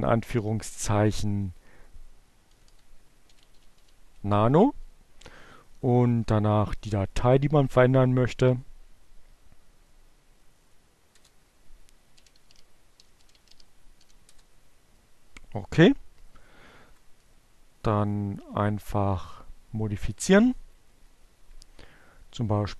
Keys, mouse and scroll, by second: 1.8 Delete, 2.7-3.8 typing, 3.8 Delete, 8.8 Right, 10.2 Return, 11.1-12.3 typing, 13.6 Return, 15.0 Down, 16.3 Up, 16.4 Right, 17.6 Left, 19.0 Delete.